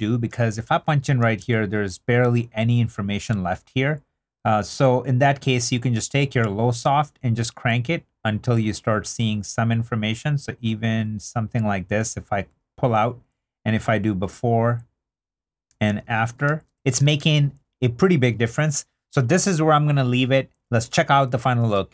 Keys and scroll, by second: 0.3 2, 11.9 3, 15.9 super+z, 16.4 shift+super+z, 17.0 shift+super+z.